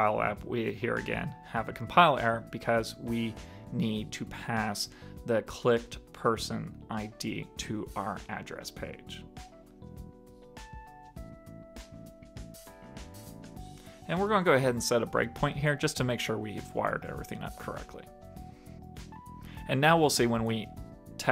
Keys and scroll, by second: 0.5 super+k, 4.0 super+Right, 11.8 super+s, 13.1 super+d, 13.9 super+Return.